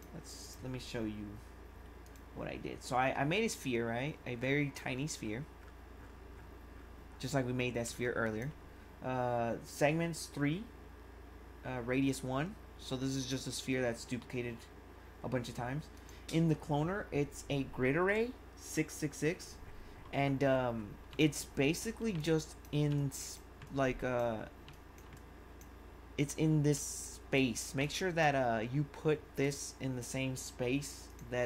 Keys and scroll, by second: 7.8 1, 21.1 1.